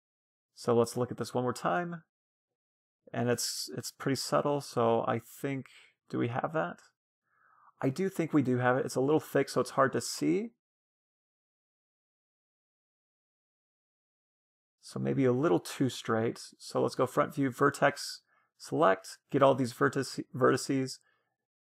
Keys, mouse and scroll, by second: 3.6-8.5 middle drag, 8.5-9.6 scroll up 1, 9.6-10.1 scroll up 1, 12.5-14.0 middle drag, 14.0 Tab, 17.1-18.9 drag, 17.4-19.4 middle drag, 17.9 a, 18.4 c, 19.5-21.5 right drag, 20.6-21.7 drag.